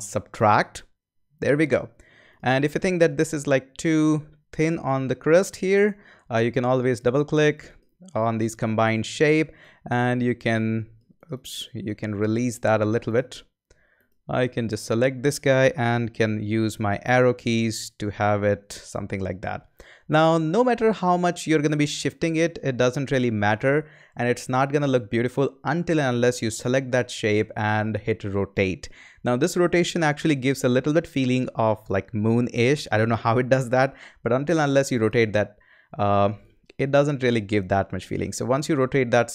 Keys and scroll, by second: 16.9 Right, 17.6 Up, 19.8 Right.